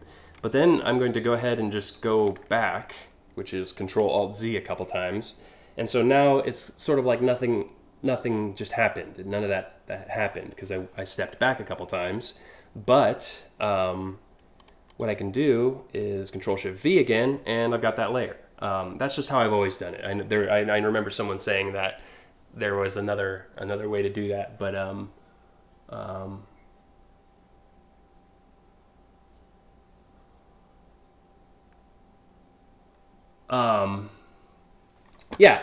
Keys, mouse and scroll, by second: 0.9 ctrl+alt+z, 2.0 ctrl+alt+z, 8.3 click, 9.1 click, 14.2 click, 14.5 click, 15.9 ctrl+shift+v.